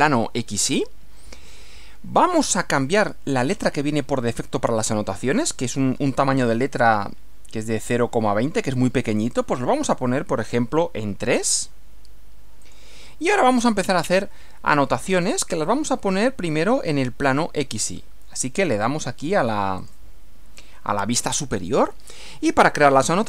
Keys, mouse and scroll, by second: 9.1 click, 11.4 3, 12.6 click, 19.9 click.